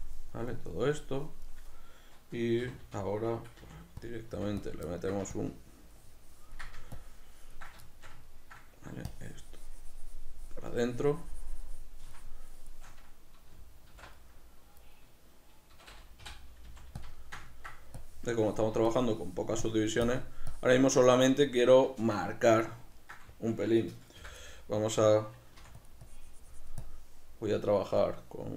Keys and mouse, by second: 2.7 c, 4.4 f, 4.8 click, 5.0 ctrl+middle click, 5.4-8.0 ctrl+drag, 8.0-9.2 shift+middle drag, 9.2-14.4 shift+drag, 14.0 alt+m, 14.4-17.1 middle drag, 17.1 shift+click, 17.2 shift+middle click, 18.0-21.6 drag, 21.6-26.0 shift+middle drag, 24.2 m, 25.6 f, 26.1-28.5 drag.